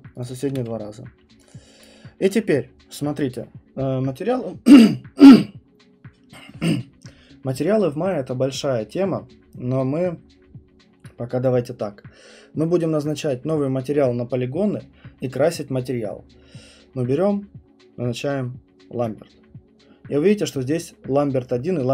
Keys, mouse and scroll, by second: 0.2 shift+click, 1.8 right click, 19.0 right click.